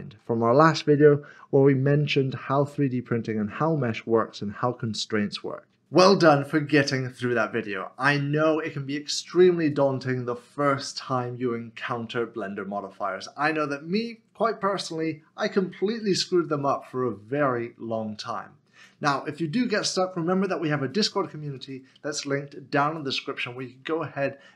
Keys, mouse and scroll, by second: 0.6 middle click, 4.5 middle click, 4.7-5.2 scroll up 1, 5.2 middle click.